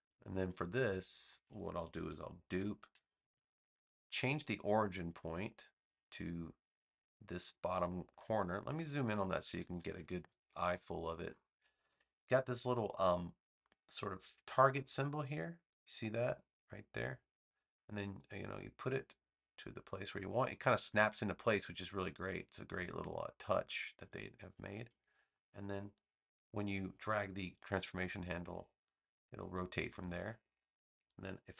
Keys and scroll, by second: 2.4 super+j, 9.4 super+=, 10.7 space.